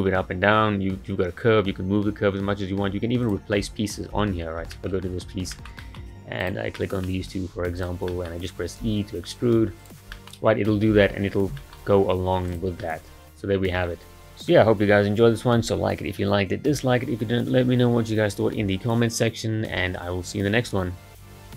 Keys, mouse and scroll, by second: 3.2 click, 4.2 Tab, 4.7-5.0 shift+middle drag, 5.0-5.5 scroll up 5, 5.5-6.4 shift+middle drag, 6.4 click, 6.8-7.8 middle drag, 7.8 shift+click, 8.1-8.9 middle drag, 8.9 e, 10.1 middle click, 11.0 Tab, 11.4 scroll down 3, 11.6 shift+middle click, 11.9-12.5 scroll up 3, 12.5 click, 12.8-21.4 middle drag.